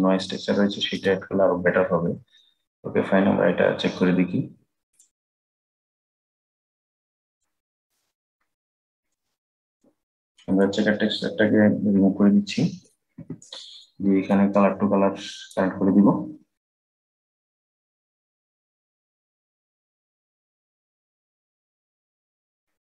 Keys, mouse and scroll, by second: 0.6-3.8 drag, 6.8-11.4 drag, 13.0 Delete, 14.0-17.0 drag.